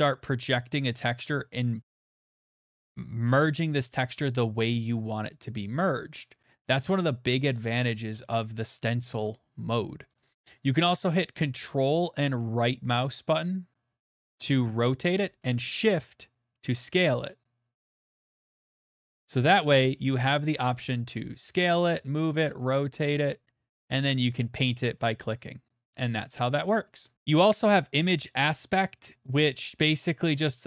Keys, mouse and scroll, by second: 0.0 right click, 1.7 click, 2.3 right click, 4.5 click, 5.3 right click, 6.5 click, 8.2 right click, 10.1 click, 15.1 ctrl+right click, 19.6 shift+right click, 20.5 shift+right click, 20.9 shift+right click, 21.5 right click, 21.8 right click, 21.9 shift+right click, 22.3 ctrl+right click, 22.8 right click, 24.9 click, 26.4 ctrl+right click, 27.1 scroll, 27.7 click, 28.9 right click, 30.3 middle click, 30.3 click.